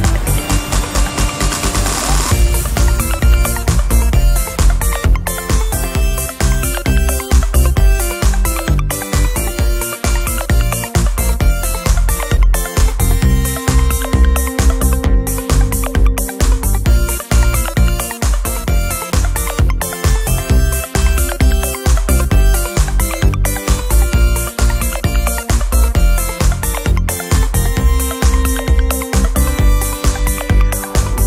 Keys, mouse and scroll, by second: 0.0 ctrl+shift+KP_Add, 1.3 ctrl+shift+click, 1.5 ctrl+middle click, 1.5 ctrl+click, 1.8 middle click, 2.9 ctrl+d, 3.9-5.2 ctrl+drag, 5.5 ctrl+shift+click, 6.3 ctrl+shift+KP_Subtract, 7.6 ctrl+shift+click, 8.5 click, 9.8 click, 10.9 click, 11.7 d, 12.8 click, 14.0 click, 14.3 click, 15.4 g, 16.6 ctrl+shift+click, 18.7 click, 19.8 click, 20.5 shift+click, 21.5 g, 22.6 click, 23.3 click, 24.4 g, 24.8 click, 26.2 scroll up 1, 26.4 ctrl+shift+click, 28.2 click, 28.9 ctrl+shift+click, 31.0 ctrl+shift+click.